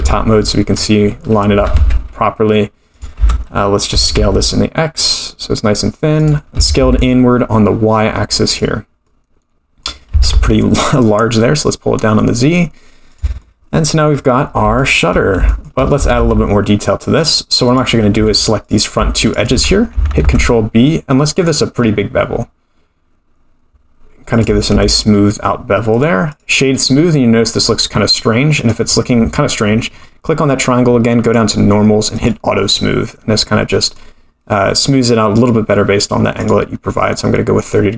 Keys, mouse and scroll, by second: 0.0 KP_7, 0.7-1.5 scroll up 7, 1.5 g, 3.1 Tab, 3.9 s, 6.5 s, 9.0 middle click, 10.1 s, 13.4 middle click, 14.1-14.6 scroll up 8, 14.8 shift+middle click, 15.1-15.5 scroll down 4, 15.5 shift+middle click, 16.0 s, 18.1 2, 18.6 click, 19.2 shift+click, 20.2 ctrl+b, 24.7 Tab, 25.1-25.6 scroll up 3, 25.9-26.9 right drag, 26.9-27.5 middle drag, 28.6 click, 29.6-30.0 scroll down 4, 31.2 click, 32.1 click, 33.3-33.7 scroll down 1, 33.7 middle click, 36.5 click, 36.8-37.1 middle drag, 37.3-37.9 middle drag.